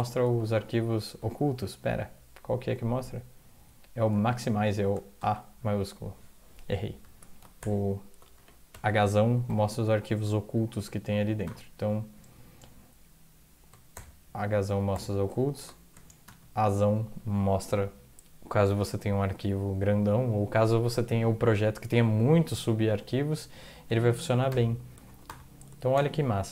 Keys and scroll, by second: 0.2 alt+Tab, 4.2 alt+Tab, 5.2 a, 7.0 typing, 7.6 ctrl+h, 8.7-9.9 typing, 11.1 ctrl+x, 11.2-11.9 typing, 13.9-14.9 typing, 16.2 typing, 22.9 a, 24.2 ctrl+x, 24.5 o, 25.0 ctrl+x, 25.2 o, 25.9 ctrl+0.